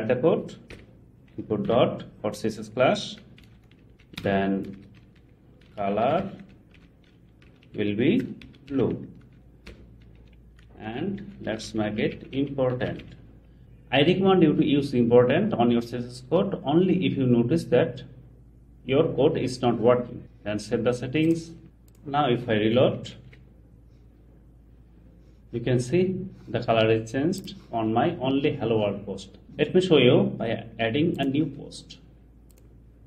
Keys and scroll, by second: 1.7 super+v, 3.9 Left, 4.2 Return, 5.0 Left, 10.2 Left, 23.1 shift+super+r.